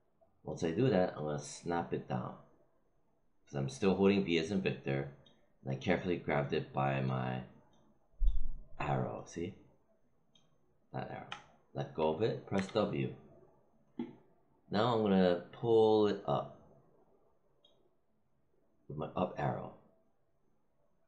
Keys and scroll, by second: 12.5 w.